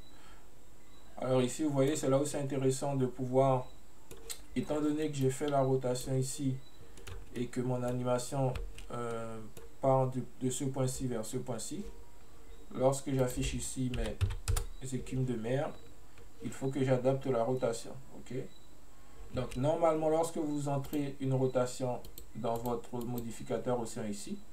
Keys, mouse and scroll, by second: 2.4-5.3 middle drag, 5.3-7.0 drag, 7.0 middle click, 7.2 space, 7.5-8.7 middle drag, 8.7 space, 9.2-12.2 middle drag, 13.3-16.3 drag, 20.9 click, 22.1 click, 22.6 click, 23.1-24.5 drag.